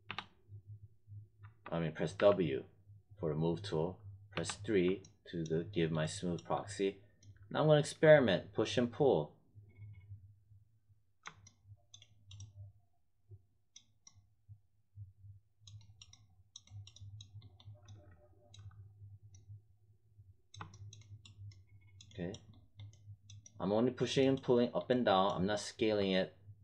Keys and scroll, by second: 0.0 3, 1.4 1, 2.1 w, 4.3 3.